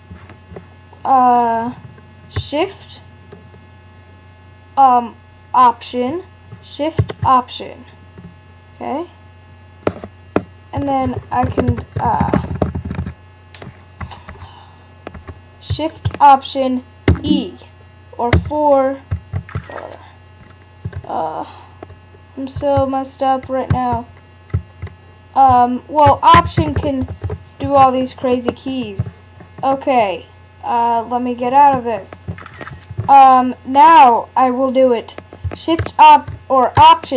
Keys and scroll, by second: 14.0 Return, 17.1 shift+super+e, 18.3 shift+super+4, 19.4 shift+super+3, 23.7 alt+shift+Left, 24.5 alt+shift+Right, 26.4 alt+5, 26.6 alt+4, 26.8 alt+5, 27.0 alt+6, 27.3 alt+7.